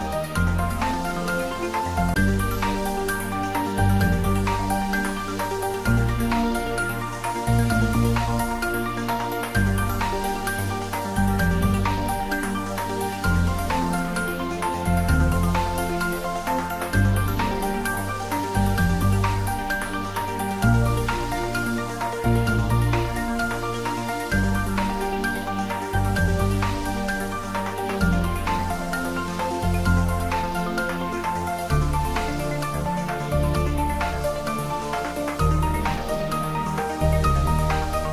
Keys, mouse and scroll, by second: 3.0-4.1 scroll down 1, 4.1 click, 7.7 click, 11.6-15.8 drag, 15.8 click, 18.6 click, 27.1 click, 30.2 scroll down 1, 34.9-35.4 scroll down 1, 36.9-38.0 scroll up 1, 38.0-38.1 scroll down 1.